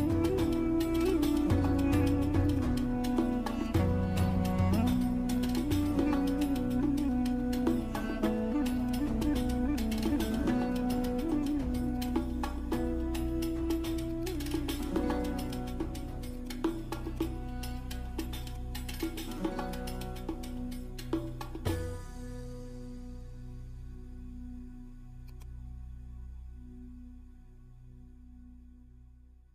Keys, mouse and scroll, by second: 0.0 click, 2.4 click, 6.3 click, 8.2-8.8 scroll down 1, 8.8 click, 8.8 click, 11.3 right click, 12.0 click, 14.0 click, 20.2 ], 20.6 ], 20.8 ], 23.9 ctrl+=, 25.3-29.2 drag, 29.2 ctrl+=.